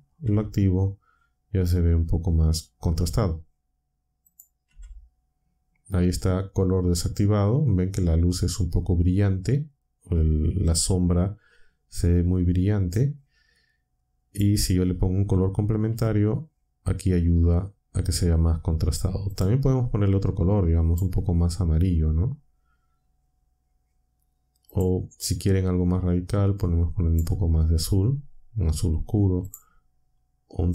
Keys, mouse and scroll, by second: 0.2 m, 4.2 click, 4.7 m, 14.2 click, 15.9 m, 19.3 click, 20.8 click, 24.7 click, 27.0 click, 29.4 click, 30.6 click.